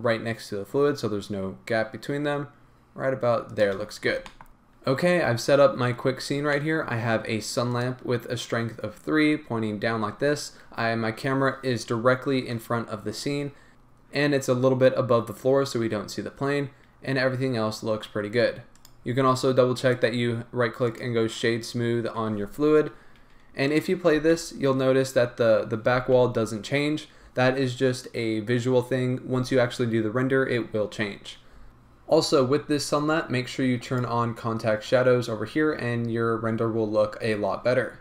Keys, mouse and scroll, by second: 3.8 scroll down 1, 4.1 a, 4.2-7.8 middle drag, 4.5-6.3 scroll up 2, 6.3-7.8 scroll down 4, 7.8 click, 10.0 scroll up 1, 12.4 KP_0, 13.5 scroll up 1, 14.9-15.2 scroll down 1, 15.9 scroll up 1, 18.8 click, 21.1-23.8 right drag, 23.8-24.1 drag, 24.1 space, 26.1 space, 31.7-37.0 middle drag, 31.7-35.5 scroll down 2, 37.0-38.0 scroll up 1.